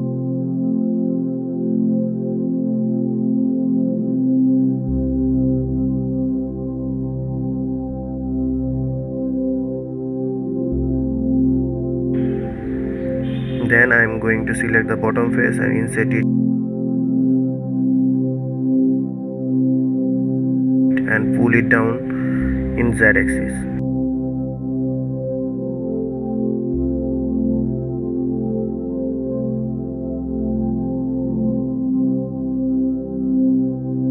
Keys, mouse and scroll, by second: 0.8 ctrl+s, 1.6-2.6 middle drag, 2.6 click, 4.5-7.0 middle drag, 7.0 scroll down 2, 7.4-8.0 middle drag, 8.0 scroll up 2, 8.2-9.5 middle drag, 9.5 click, 9.8 Tab, 10.2 middle click, 11.0-11.4 scroll up 2, 11.4-12.4 middle drag, 12.4 click, 13.6 3, 14.1 click, 18.9-20.1 middle drag, 20.1 e, 24.5 KP_3, 25.9 e.